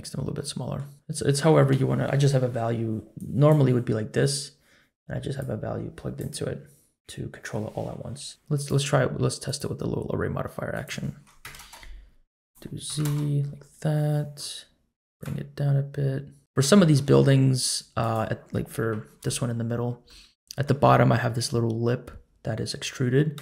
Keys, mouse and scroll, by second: 0.4-0.8 middle drag, 0.9-1.8 scroll up 1, 2.3 middle click, 3.1-3.5 drag, 5.4-6.3 drag, 8.3 middle click, 8.3 scroll down 4, 8.6-9.6 drag, 10.7-11.7 drag, 12.4 click, 13.9-14.4 middle drag, 15.2-16.4 shift+drag, 16.4 scroll up 1, 16.5 scroll down 1, 16.7 shift+middle click, 17.1-17.5 scroll up 1, 17.5-18.0 scroll down 1, 18.0 click, 18.0 scroll down 1, 18.8 KP_Decimal, 19.4-20.0 scroll up 2, 20.0-20.6 middle drag, 23.0-23.4 scroll down 5.